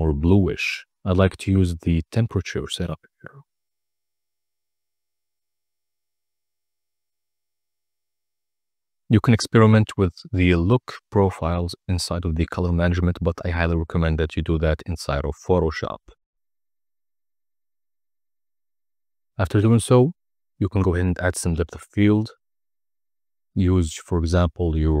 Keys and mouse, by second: 1.3 click, 3.1-3.9 middle drag, 5.3 click, 6.3 click, 7.2 click, 8.1-9.5 drag, 12.4-13.1 drag, 24.3-25.0 drag.